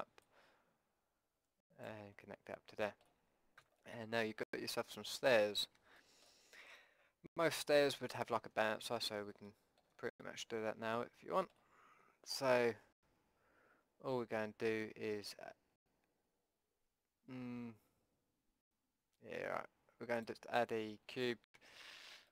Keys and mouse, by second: 0.3-2.2 drag, 2.2-3.7 middle drag, 3.7 a, 5.2-6.2 drag, 12.1 Tab, 12.7 Tab, 14.3 Tab, 17.8 Tab, 19.0 Tab, 20.2-22.3 drag, 21.5 Tab.